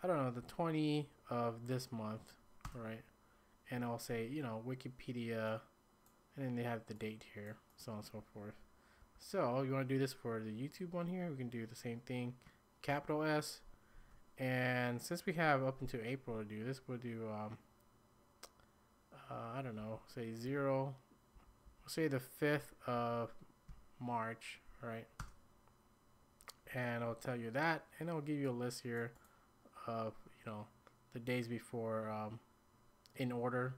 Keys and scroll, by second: 0.4 Down, 2.6 Return, 9.0 j, 12.9 s, 19.8 Down, 20.5 Right, 21.3 Up, 21.6 Up, 22.6 Right, 22.9 Right, 23.7 Up, 25.2 Return.